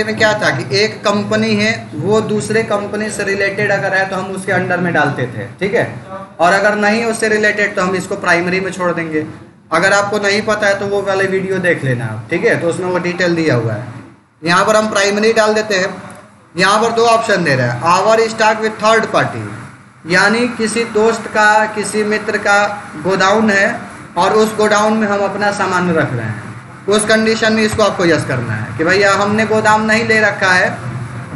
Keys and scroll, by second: 14.3 Return, 27.5 y.